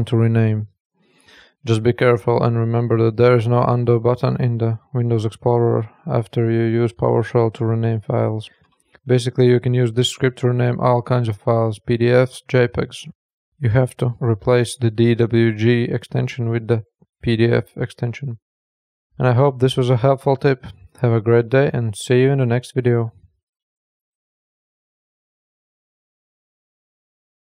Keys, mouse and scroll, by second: 6.1 click, 8.1 click, 17.7 click.